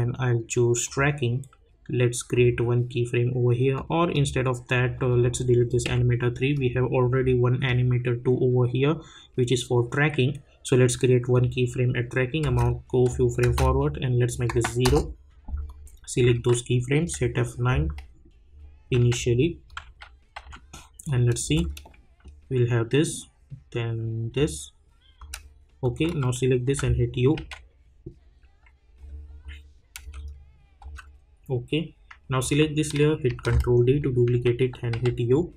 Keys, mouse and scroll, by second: 4.3 click, 5.9 click, 8.1 -, 11.3 click, 12.4 space, 14.3 click, 14.8 Return, 15.6-17.0 drag, 17.0 F9, 18.9 j, 19.7 click, 19.8 u, 20.3 u, 21.0 click, 21.4 space, 25.3 space, 25.8 click, 26.6-27.8 typing, 30.0 space, 33.2 ctrl+d, 34.2-35.4 typing.